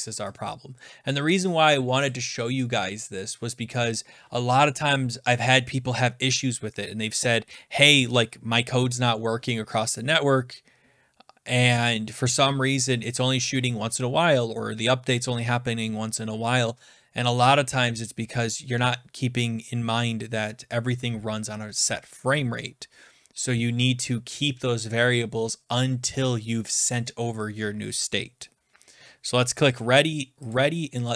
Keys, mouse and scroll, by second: 0.8 click, 1.4 click, 2.1 click, 3.3 click, 4.0 click, 29.8 click, 30.5-31.1 drag.